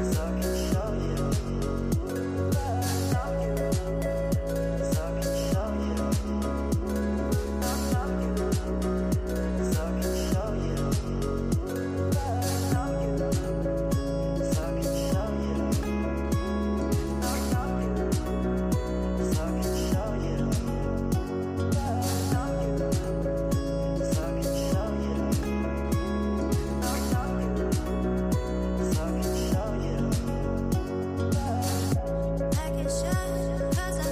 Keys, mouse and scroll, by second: 0.4-4.3 drag, 4.3-4.8 scroll down 5, 4.8-7.3 middle drag, 7.3 shift+a, 12.0-12.7 scroll up 7, 12.7-14.1 middle drag, 14.1-16.9 drag, 16.9-17.9 middle drag, 17.9-19.4 drag, 21.1-22.8 middle drag, 22.8 shift+a, 28.2-30.9 drag, 32.5 scroll down 1, 33.2-34.1 middle drag.